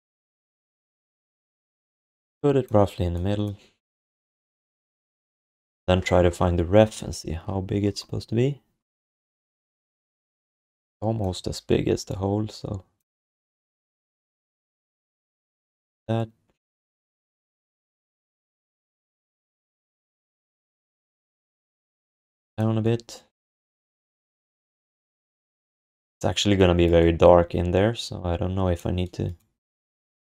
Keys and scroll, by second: 10.5 r, 11.4 r, 14.8 w, 25.4 ctrl+s.